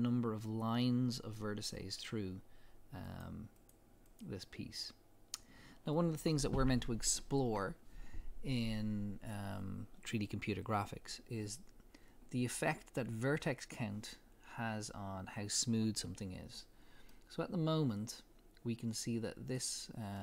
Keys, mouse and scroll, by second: 17.1-20.2 middle drag.